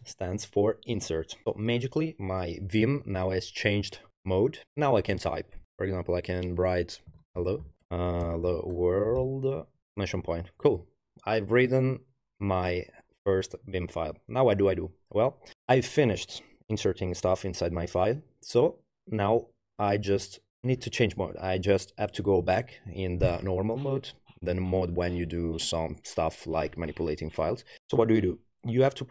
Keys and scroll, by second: 6.9-10.1 typing.